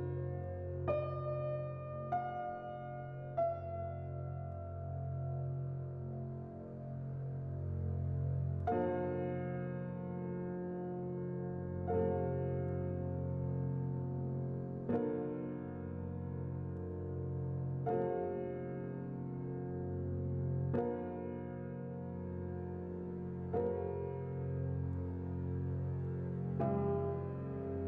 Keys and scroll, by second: 0.5-1.4 typing, 2.9-3.8 typing, 16.3-17.2 typing, 22.6 1.